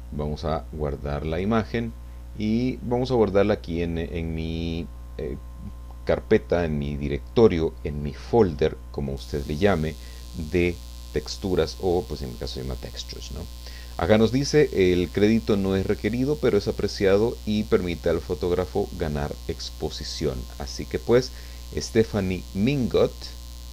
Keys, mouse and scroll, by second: 1.3 click, 13.2 click.